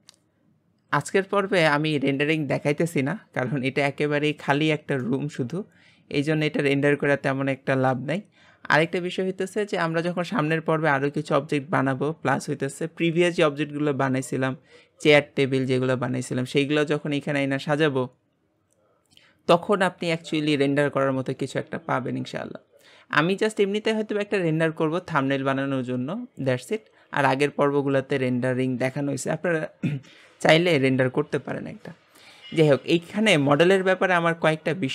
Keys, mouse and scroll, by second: 0.0-12.4 shift+middle drag, 33.4-34.9 middle drag.